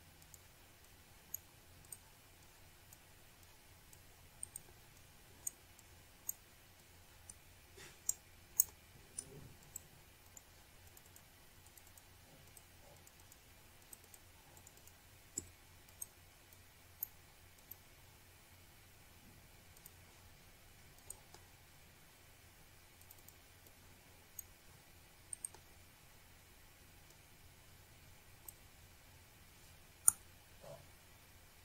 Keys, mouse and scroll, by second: 2.1 click, 2.9 click, 3.2 click, 3.9 click, 6.4 click, 8.2 click, 9.6 click, 13.0 click, 14.0 click, 15.0 click, 16.6 click, 17.1 click, 18.6 click, 20.3 click, 22.0 shift+right click, 24.9 click, 26.0 click, 27.6 click, 27.7 double click, 28.5 click, 28.7 click, 28.8 double click, 29.3 click, 30.3 click, 30.6 click.